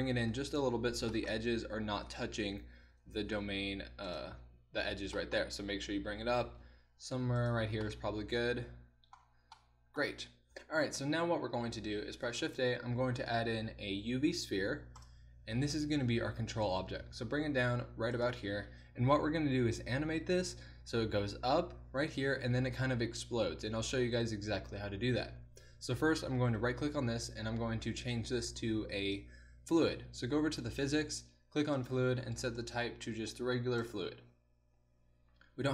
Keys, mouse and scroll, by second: 2.9 g, 6.5 g, 10.6 KP_1, 12.4 shift+a, 17.1 g, 21.2 g, 26.6-28.2 right drag, 28.5-30.9 right drag, 30.9-35.7 drag.